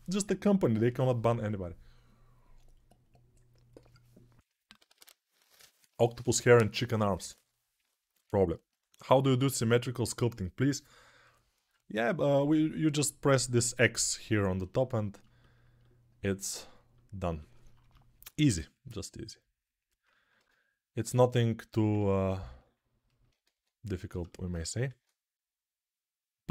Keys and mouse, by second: 18.1 shift+r, 21.1 ctrl+r, 22.3-26.5 ctrl+alt+drag, 23.4 ctrl+z, 24.6 shift+r.